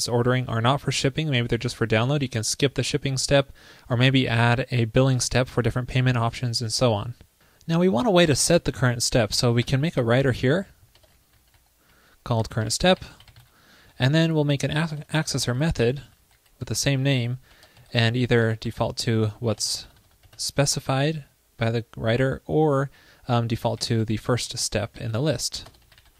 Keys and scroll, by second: 4.0 alt+Right, 11.0 super+Return, 14.9 super+Return, 25.8 alt+BackSpace.